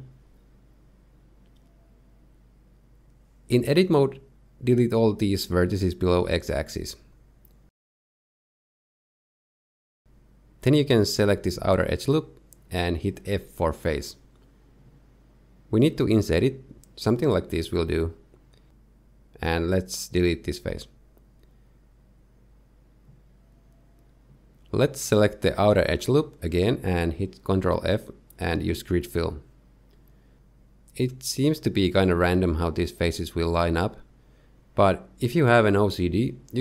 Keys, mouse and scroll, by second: 5.7 Tab, 6.2 z, 6.6 click, 8.4 x, 11.3 middle click, 12.2 alt+click, 12.5 z, 13.1 shift+middle click, 13.4 middle click, 15.3 f, 15.6 middle click, 17.2 i, 22.3 x, 24.0 alt+click, 24.5 middle click, 27.9 ctrl+f, 31.2 ctrl+KP_7, 33.9 click, 35.3 click.